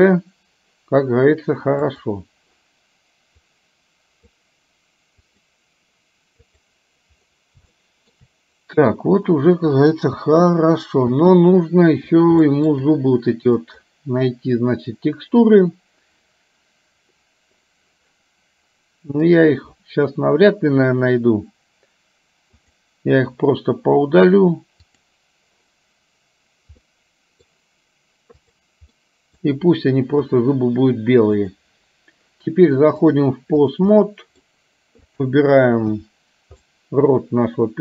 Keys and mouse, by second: 2.0 click, 3.6 click, 5.4 click, 7.7 shift+middle click, 10.4 space, 11.2 space, 12.5 shift+middle click, 13.6 click, 22.9 click, 25.1 click, 26.9 middle click, 29.1 middle click, 30.4 KP_1, 31.5 click, 33.1 click, 34.0 middle click, 35.1 click, 36.0 KP_1, 36.9-37.8 middle drag.